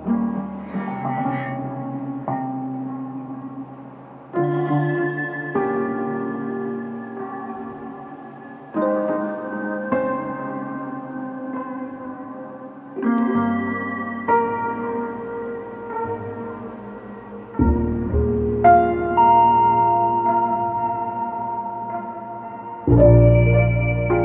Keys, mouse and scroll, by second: 0.4-3.5 drag, 9.8 click, 11.2 click, 12.6-15.2 middle drag, 15.2 click, 17.2 click, 20.4 click, 21.9 click, 23.9 click.